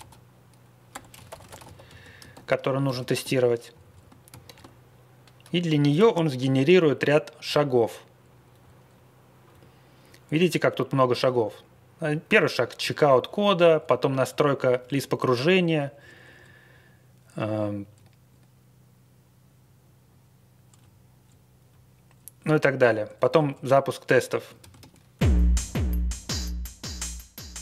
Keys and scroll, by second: 0.0-3.3 typing, 4.3 ctrl+c, 4.4 ctrl+c, 5.9 ctrl+x, 6.1 o, 6.7-7.3 Up, 7.3 Up, 8.0 Up, 8.6 Down, 9.5 Up, 10.0 Right, 10.9 Down, 11.3 Down, 11.6 Right, 11.8 Right, 11.9 Right, 11.9 Right, 12.0 Right, 12.5 Left, 12.8 Down, 13.0 Down, 13.2 Down, 13.5 Down, 13.7 Down, 14.2 Down, 14.5 Down, 14.8 Down, 15.0 Down, 15.1 Down, 15.1 Down, 15.2 Down, 15.8 Up, 15.9 Up, 16.1 Up, 16.3 Up, 16.7 Up, 17.5 Down, 17.8 Down, 17.8 Page_Down, 18.7 Page_Down, 20.7 Page_Down, 21.2 Down, 21.9 Down, 21.9 Down, 22.5 Down, 22.8 Up, 23.1 Up, 23.4 Page_Up, 24.6 ctrl+x, 24.7 o.